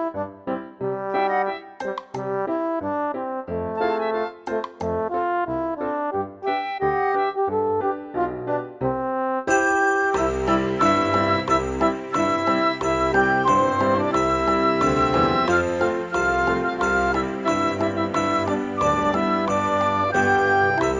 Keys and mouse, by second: 0.3 shift+middle click, 1.7 middle click, 2.3 g, 2.6 z, 3.8 click, 4.2 s, 5.4 click, 5.6 g, 6.0 x, 8.2 click, 8.6 s, 9.3 click, 9.5 g, 9.5 x, 10.6 click, 12.0 click, 12.5 shift+middle click, 13.2 click, 14.9 shift+middle click, 18.6 click, 19.2 shift+middle click, 20.0 e.